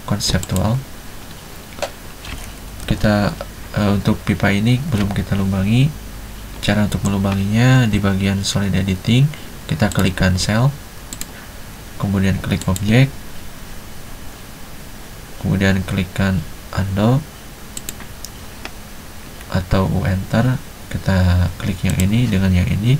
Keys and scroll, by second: 3.0 F7.